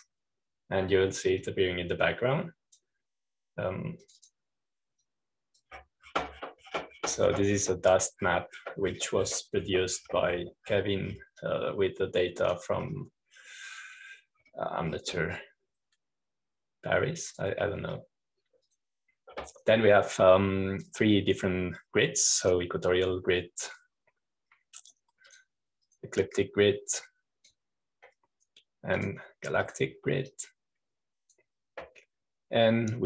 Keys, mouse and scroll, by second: 0.0-2.4 drag, 3.4-5.6 drag, 6.0-8.1 drag, 8.1-12.8 scroll down 2, 12.8-13.4 scroll down 1, 13.4-15.4 drag, 15.4-17.4 scroll down 2, 17.4-20.0 drag, 20.6-22.4 drag, 24.4-25.5 drag, 27.2-30.3 drag, 30.9-31.9 drag, 32.2-33.0 drag.